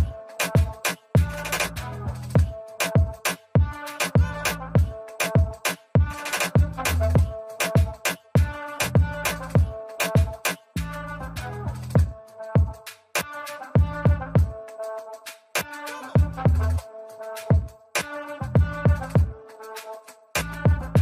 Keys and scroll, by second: 11.3 n.